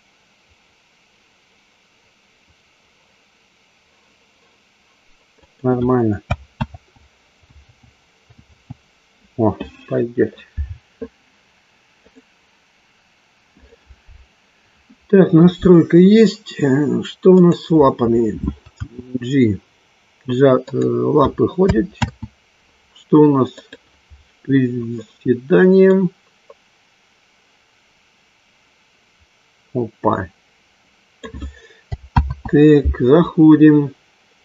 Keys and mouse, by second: 5.3 click, 6.6 ctrl+z, 7.6 ctrl+z, 8.4 ctrl+z, 13.4 click, 17.2 click, 19.2 g, 20.6 click, 22.2 ctrl+z, 23.6-24.6 drag, 26.0-31.2 drag, 32.8 ctrl+z, 34.3 click.